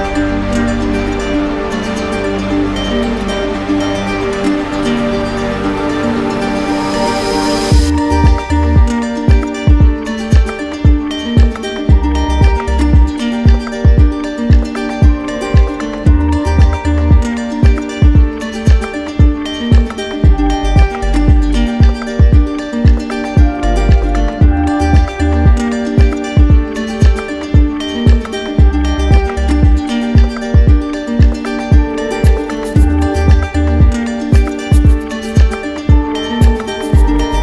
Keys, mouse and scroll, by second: 0.7-1.8 drag, 2.7-3.8 drag, 10.2-11.3 drag, 13.4 click, 16.3 click, 16.7 shift+click, 18.5-19.6 drag, 27.3-28.4 drag, 29.4-31.4 drag, 32.2 click, 37.0 click.